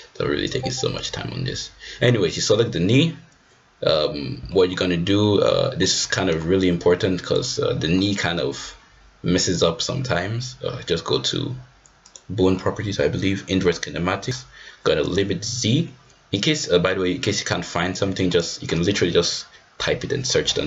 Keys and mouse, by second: 0.9-2.0 drag, 4.5 middle drag, 5.2-5.7 middle drag, 7.3 click, 12.0-20.6 drag.